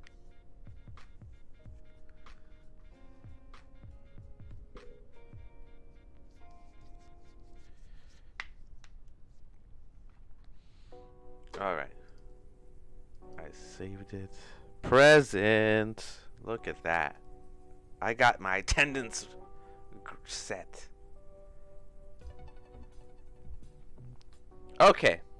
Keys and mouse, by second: 12.1-13.3 drag, 19.2-22.4 drag.